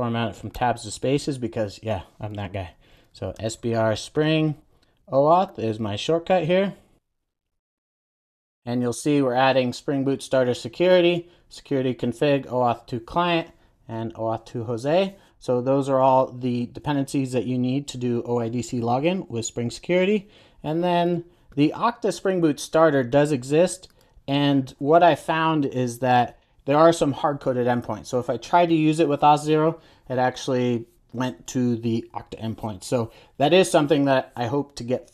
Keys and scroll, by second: 6.9 super+j, 7.5 Return, 8.2 super+s.